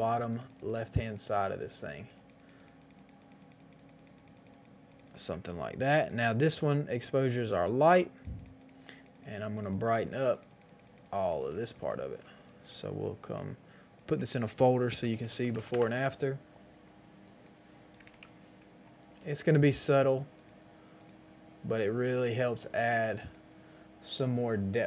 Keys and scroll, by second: 14.8-15.5 typing, 15.7 Return, 17.9 KP_1, 17.9 KP_0, 18.1 KP_0, 18.1 Return.